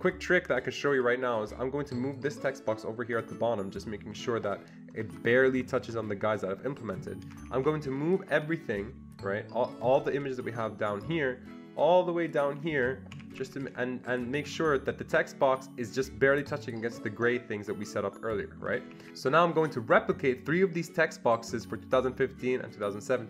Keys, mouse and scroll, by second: 2.2-5.3 shift+drag, 4.9 Down, 5.1 Down, 5.3 Down, 5.5 Down, 5.8 Down, 7.3 Escape, 7.4 Escape, 7.6 Escape, 8.1-10.9 drag, 10.9-13.5 shift+drag, 13.1 Escape, 13.3 Escape, 13.5 Escape, 13.6 Escape, 14.1 click, 14.5 Escape, 16.6 click, 18.7 Escape, 18.9 Escape, 19.0 Escape.